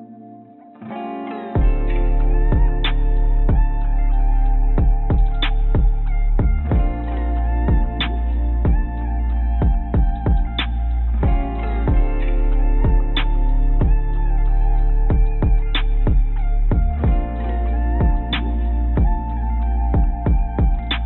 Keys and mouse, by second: 4.1 click, 4.1 right click, 5.6 click, 5.6 right click, 6.9 click, 8.5 click, 13.3 click, 14.8 Tab, 17.4 Tab.